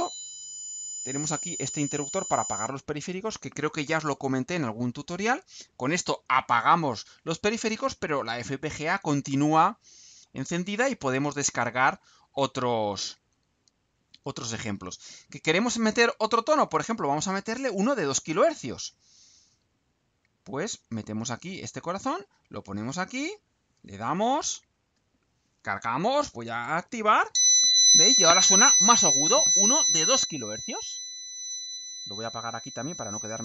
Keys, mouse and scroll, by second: 21.2 click, 23.3 click, 24.5 ctrl+u.